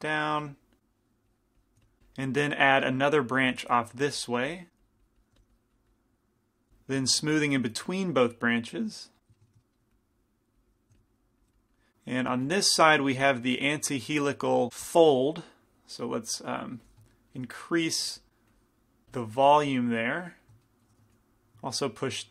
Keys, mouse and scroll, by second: 0.5 f, 0.9-2.0 drag, 1.8 f, 2.0 ctrl+z, 3.0-6.7 drag, 3.5 f, 5.4 f, 6.7 ctrl+z, 7.3-9.9 drag, 9.4 middle click, 10.9-12.0 drag, 11.0 f, 12.5 f, 13.2 f, 14.3 middle click, 15.0 f, 15.2 f, 15.8-19.0 drag, 16.9 f, 17.3-19.0 middle drag, 18.2 f, 19.2 f, 19.7 f, 20.2 click, 21.2 f.